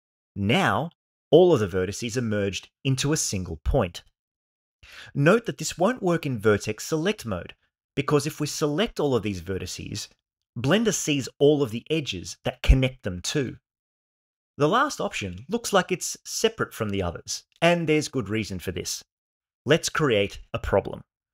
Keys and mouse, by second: 4.9 1, 9.7 m.